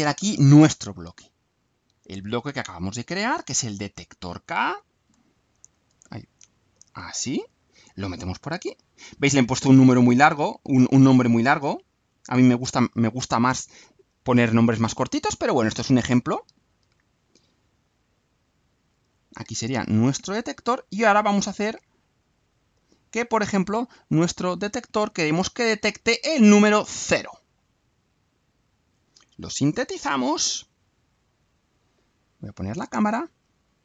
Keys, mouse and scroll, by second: 2.4 click, 3.7 click, 5.1 Delete, 5.2-5.9 drag, 6.4 alt+click, 7.3 click, 8.9 click, 11.8-12.8 drag, 13.2-14.2 drag, 16.1-16.8 drag, 17.0 ctrl+1, 18.4-19.6 drag, 20.3 click, 21.4 click, 22.3 click, 23.6-25.1 right drag, 25.9 click, 26.6 BackSpace, 27.0 0, 28.1-29.1 right drag, 29.9 ctrl+u, 30.9 click, 32.6 click, 33.6-33.8 right drag.